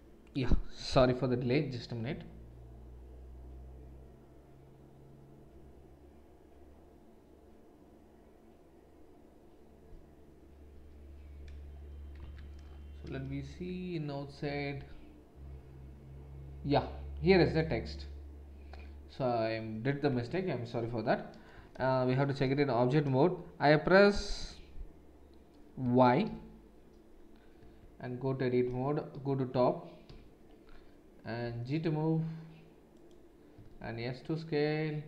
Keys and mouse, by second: 12.2 Tab, 13.3 shift+a, 20.1 Tab, 21.5 BackSpace, 21.7 BackSpace, 22.0 BackSpace, 22.4 BackSpace, 26.2 shift+y, 27.6 Tab, 30.1 KP_7, 31.4 g, 33.5 s.